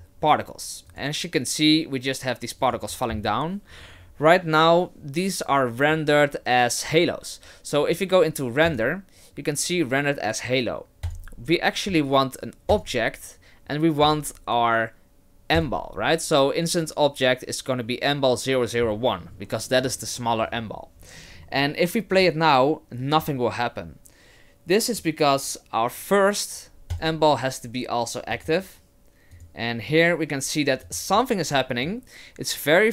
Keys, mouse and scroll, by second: 0.9 click, 2.6 click, 8.7 click, 11.1 click, 14.0 click, 16.0-17.1 scroll down 1, 17.1-17.7 scroll down 2, 22.1 click, 23.1 click, 26.9 click, 28.3 click, 29.3 click, 30.8 click, 31.9 click.